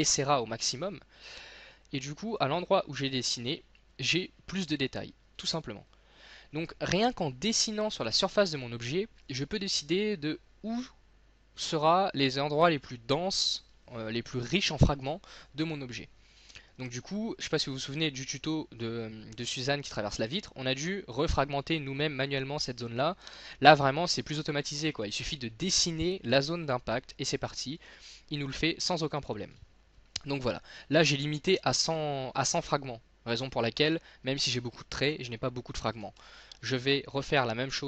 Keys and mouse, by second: 2.6-4.4 drag, 3.0 z, 33.1-34.8 middle drag, 36.2 ctrl+z.